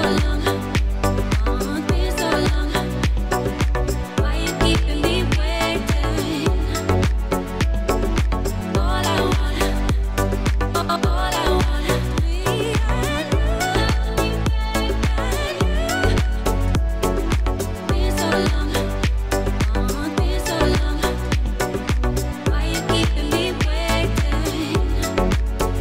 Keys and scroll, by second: 0.0-0.3 typing, 3.7 Escape, 8.4 typing, 9.4 Return, 12.5 Return, 14.1 BackSpace, 16.6 typing, 21.2-22.0 typing, 22.3 Return, 24.2 Return, 25.4 Return, 25.5 ctrl+a.